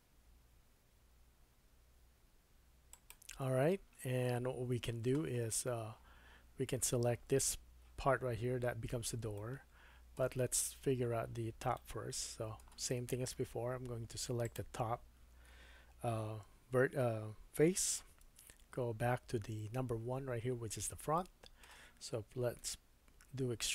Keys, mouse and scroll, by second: 9.4 shift+middle click, 11.8 middle click, 13.4 3, 14.4 click, 18.2 KP_1, 21.1 shift+middle click, 22.6 e.